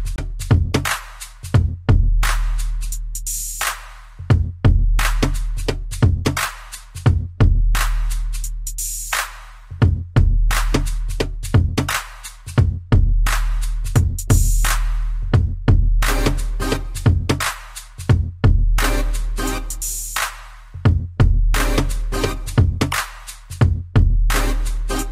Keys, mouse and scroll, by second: 0.7 b, 1.0 middle click, 2.6 b, 2.8 middle click, 4.0 b, 4.3 middle click, 5.0 middle click, 5.9 click, 6.8 Escape, 7.7 click, 8.9 Escape, 9.3 middle click, 10.7 click, 10.8 click, 12.5 click, 12.6 click, 13.5 Down, 14.4 scroll down 3, 14.7 shift+middle click, 15.5 middle click, 16.0 scroll up 2, 16.6 scroll up 1, 16.9 middle click, 18.0 click, 18.1 click, 21.4 typing, 22.6-23.0 typing, 24.7 i.